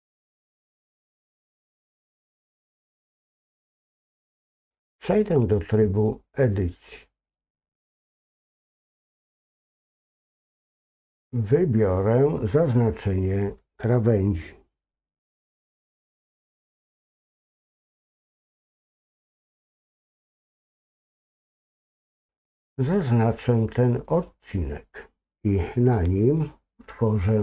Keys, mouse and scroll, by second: 0.0 click, 3.9-4.2 scroll down 1, 7.2-9.4 drag, 11.0 click, 17.7 shift+click, 20.4 ctrl+click.